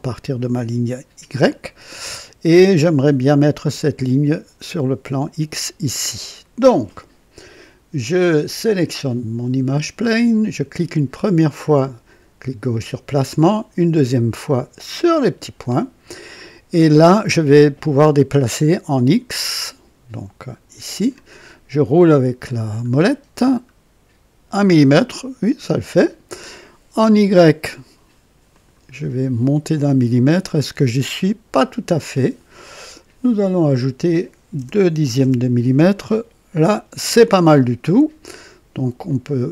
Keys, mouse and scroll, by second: 8.6 click, 12.9 click, 15.0 click, 20.8 click, 23.2 scroll down 2, 28.5 click, 29.2 scroll up 2, 30.4 scroll up 2, 32.9 click, 34.5 BackSpace, 35.2 KP_2.